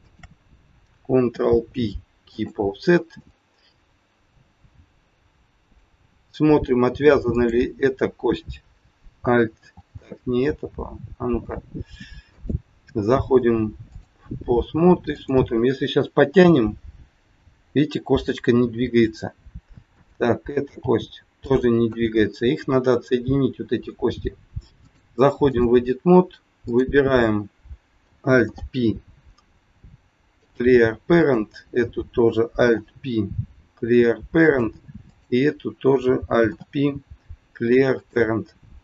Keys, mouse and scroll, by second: 0.0 shift+click, 1.1 ctrl+p, 3.1 middle click, 6.0 scroll up 2, 7.3 click, 12.3 click, 15.1 click, 16.4 g, 19.9 click, 20.8 g, 22.4 scroll up 2, 24.8 click, 26.6 click, 28.4 alt+p, 31.0 click, 32.5 alt+p, 35.0 click, 36.4 alt+p, 38.7 scroll down 2.